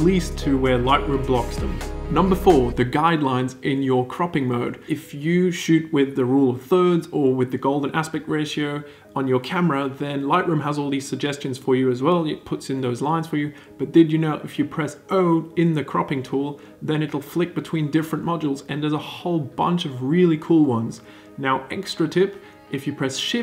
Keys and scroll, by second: 14.3 o, 20.4 shift+o.